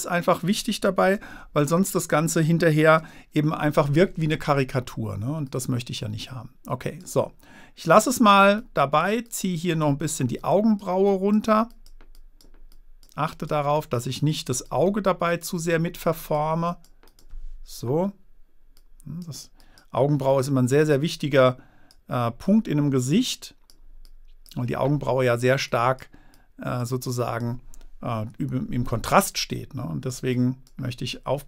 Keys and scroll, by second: 1.2 super+z, 3.1 super+z.